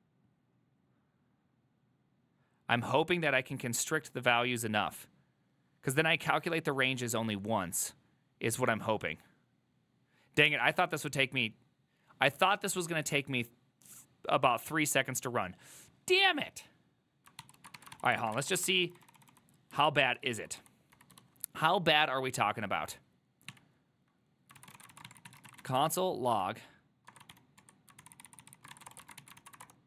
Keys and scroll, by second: 17.7 ctrl+a, 17.9-21.7 typing, 18.0 ctrl+c, 19.1 ctrl+d, 19.8 ctrl+u, 23.6-29.8 typing.